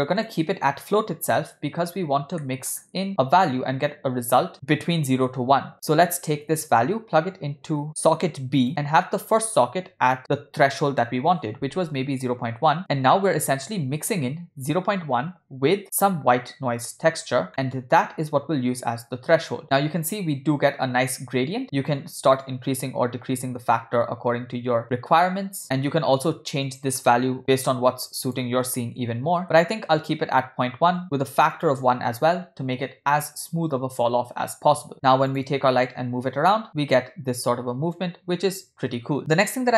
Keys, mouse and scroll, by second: 2.4 middle click, 2.8 scroll up 1, 5.7 middle click, 6.8-8.7 drag, 9.2-12.6 drag, 17.5 middle click, 18.2-19.6 drag, 21.6 middle click, 22.4-25.6 drag, 26.6 click, 28.2-29.4 drag, 29.1 0, 31.0 click, 32.4-33.4 scroll down 1, 33.4 scroll down 1, 34.4 middle click, 34.9-35.3 scroll down 4, 35.3 click, 36.7 g, 39.2 click.